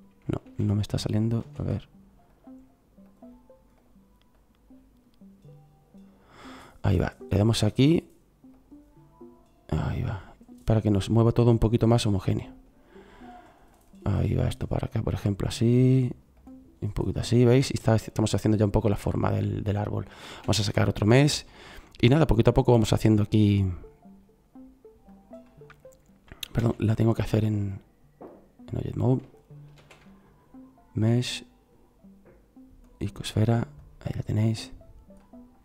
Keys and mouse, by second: 0.4 ctrl+a, 1.4 ctrl+z, 17.6-18.7 middle drag, 20.3 shift+a, 26.6 ctrl+z, 28.4 ctrl+z, 29.8 shift+a.